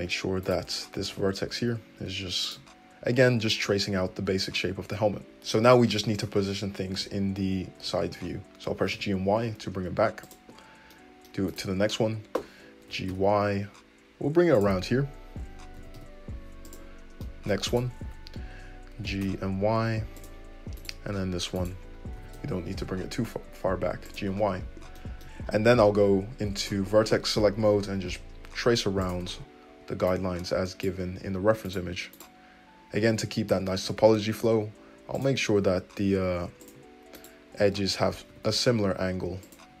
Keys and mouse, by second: 0.0 1, 0.4 click, 1.1 g, 2.4-10.9 shift+drag, 4.6 `, 6.9 g, 10.9 middle click, 11.5 click, 11.5-16.2 middle drag, 11.9 `, 12.9 g, 15.7 g, 17.7 click, 18.0 `, 19.0 g, 20.7 click, 21.1-26.6 drag, 21.1 `, 22.1 g, 25.8 1, 26.6 right click, 26.6-30.0 middle drag, 27.5 g, 30.0-31.7 right drag, 31.7 middle click, 32.1 right click, 32.2-37.1 middle drag, 33.8 g, 35.7 g, 37.1 click, 37.2-39.1 middle drag, 38.3 g, 39.1-39.8 drag.